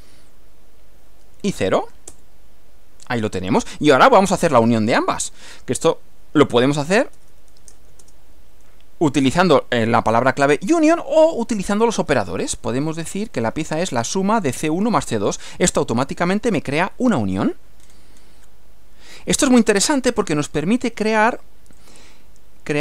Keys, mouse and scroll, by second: 1.3 0, 2.1 Return, 6.5-8.3 typing, 11.5 c, 12.2 1, 12.3 space, 13.1 BackSpace, 14.2 space, 14.5 c, 14.9 2, 15.7 Return, 17.8-18.1 scroll down 2, 18.3 scroll down 2, 18.5-20.1 middle drag, 21.8 click.